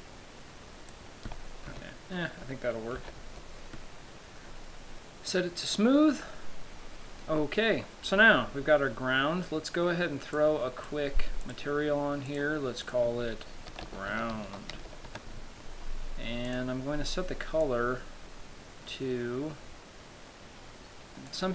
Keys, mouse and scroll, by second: 2.0 Tab, 2.6 Tab, 3.3 z, 3.6 Tab, 6.0 click, 10.6 click, 11.8 click, 12.6 click, 13.1 click, 16.8 click.